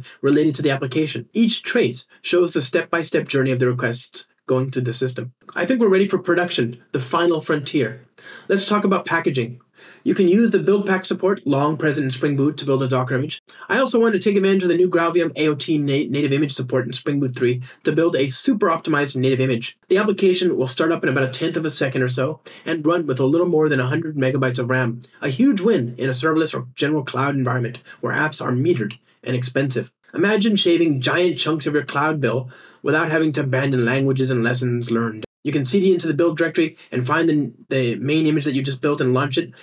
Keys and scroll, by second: 28.9 super+F2.